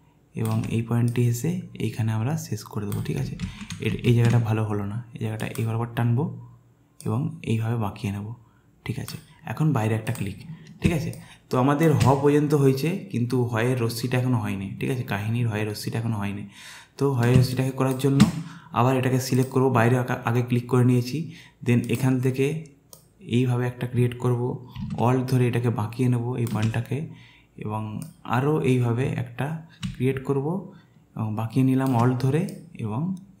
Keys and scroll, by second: 3.4 ctrl+z, 4.0 ctrl+z, 10.9 space, 17.4 space.